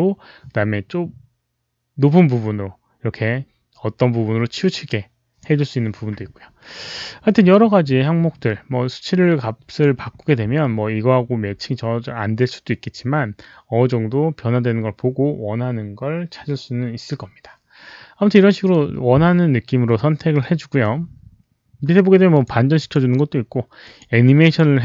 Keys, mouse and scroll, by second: 22.2 click, 22.7 click, 23.7 click, 24.3 click.